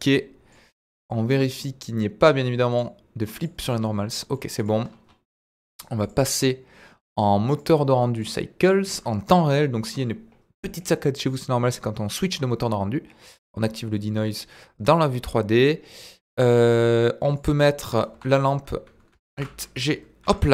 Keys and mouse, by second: 1.4-3.6 drag, 3.8-4.3 middle drag, 6.7 drag, 8.1-9.6 drag, 10.8-11.7 drag, 13.2 click, 17.3 click, 18.1 KP_1, 19.3 alt+g, 20.2 g.